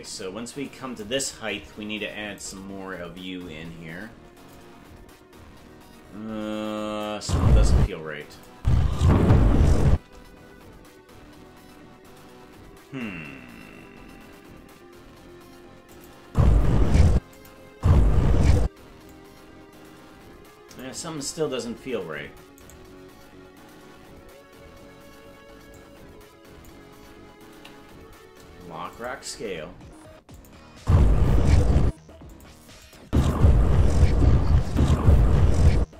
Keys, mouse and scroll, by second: 2.6 right click, 4.5-7.0 drag, 7.2 space, 7.8 space, 8.3 click, 8.5 space, 15.9 click, 16.2 space, 17.1 space, 17.3 click, 17.7 space, 18.6 space, 19.1-20.8 drag, 22.8 right click, 25.7 click, 27.5 i, 30.3 click, 30.8 space, 32.3 click, 32.8 click, 33.0 space, 34.7 click, 35.7 space.